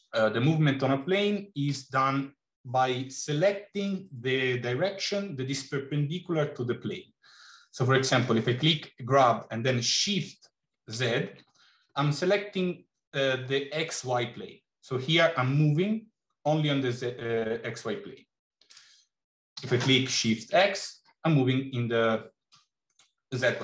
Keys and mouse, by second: 1.7 g, 19.4 g.